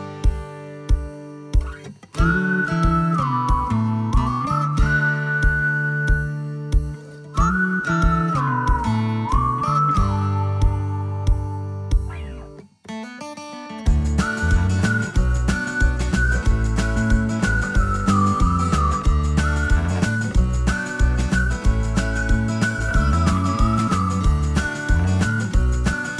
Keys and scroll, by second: 10.6-13.7 typing, 15.7-25.1 typing, 25.9 Escape.